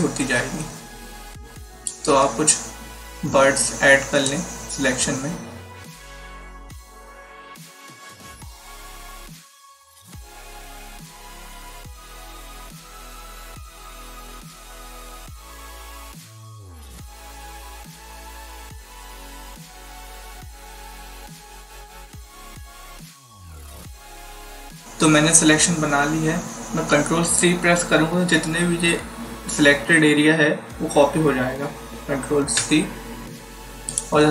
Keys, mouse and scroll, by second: 4.2 shift+click, 6.6 click, 7.9 click, 8.8 click, 9.6 click, 10.6 click, 11.4 click, 12.8 click, 14.0 click, 15.7 click, 17.1 click, 19.2 click, 20.5 click, 21.4 click, 22.4 click, 32.5 ctrl+c, 33.8 click.